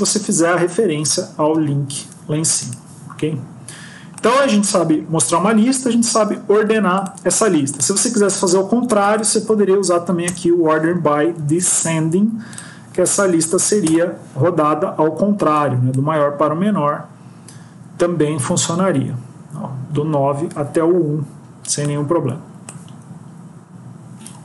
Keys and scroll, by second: 8.7 Left, 10.2 Return, 11.3 ctrl+s.